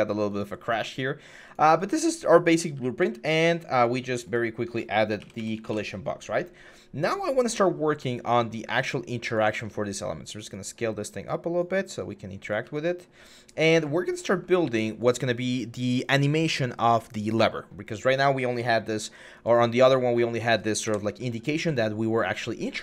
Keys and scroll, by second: 1.8-2.8 typing, 4.9-5.5 typing, 9.3 r, 12.4 w, 20.7 Delete.